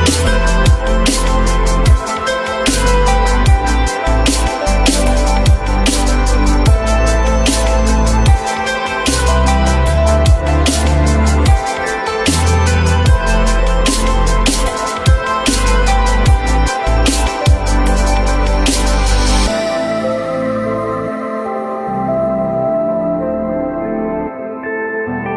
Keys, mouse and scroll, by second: 3.8 alt+middle click, 4.8 alt+middle click, 7.1 l, 8.3 z, 10.2 z, 11.7 F3, 13.3 r, 16.0 ctrl+z, 18.2 ctrl+y.